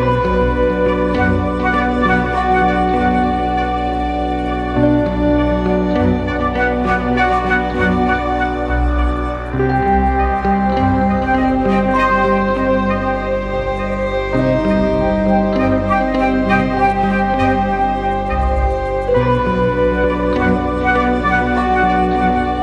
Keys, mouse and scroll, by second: 3.5 Return, 4.0 alt+click, 6.1 ctrl+t, 9.3 Return, 11.4 alt+right click, 11.7 alt+click, 15.7 ctrl+h, 19.1 Return, 19.4 ctrl+h, 19.8 ctrl+h, 21.2 alt+right click, 21.8 alt+click.